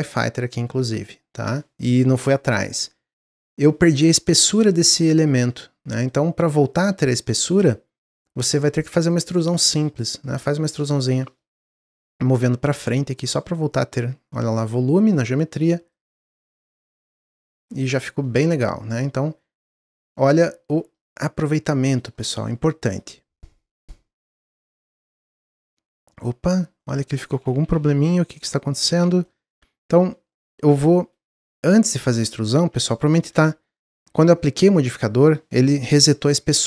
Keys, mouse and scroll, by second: 2.7-8.9 middle drag, 8.9-11.9 drag, 13.3-14.6 middle drag, 14.6 Tab, 14.9 middle click, 15.8 click, 16.3-16.7 middle drag, 16.7-17.4 scroll down 3, 17.6 click, 17.8-20.6 middle drag, 20.6-21.3 scroll up 4, 21.4 middle click, 22.0 scroll up 1, 22.4-22.8 middle drag, 22.8 click, 23.1-24.8 middle drag, 24.8-25.1 scroll up 1, 25.1-25.5 shift+middle drag, 25.5 scroll up 2, 25.8-27.1 middle drag, 27.1 ctrl+z, 27.3 ctrl+z, 27.5 ctrl+z, 27.7 ctrl+z, 27.9 ctrl+z, 28.4 middle click, 28.7 scroll down 1, 28.8 ctrl+z, 29.2 middle click, 29.6 a, 29.9 scroll down 1, 30.2-32.0 middle drag, 32.0 ctrl+z, 32.4 ctrl+z, 33.3 Tab.